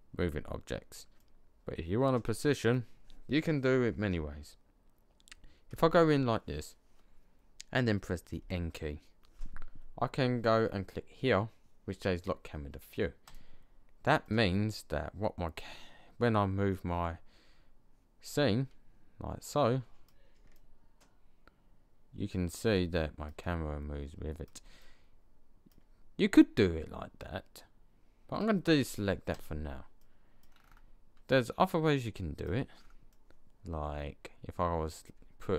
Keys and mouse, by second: 1.0-2.1 middle drag, 5.6 KP_0, 8.2 n, 13.2 click, 20.5 middle click, 21.2-21.9 middle drag, 22.8 middle click, 31.9-32.6 middle drag.